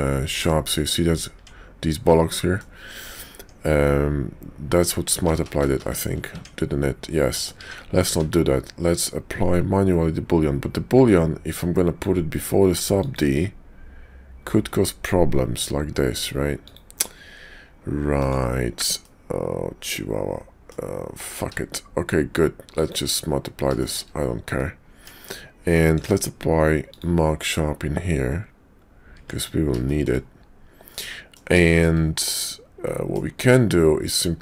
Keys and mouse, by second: 0.3 click, 1.3 Tab, 2.3 click, 3.4 Tab, 5.1 ctrl+z, 5.3 ctrl+z, 5.5 ctrl+z, 5.8 ctrl+z, 6.3 Tab, 7.4 click, 7.6 Tab, 8.2 ctrl+`, 19.0-20.7 middle drag, 21.4 q, 23.8 shift+click, 24.9 Tab, 26.0 q, 29.2 Tab, 29.8 shift+click, 30.9 click, 31.6 shift+middle click, 32.4 middle click, 33.4 Tab, 34.2 middle click.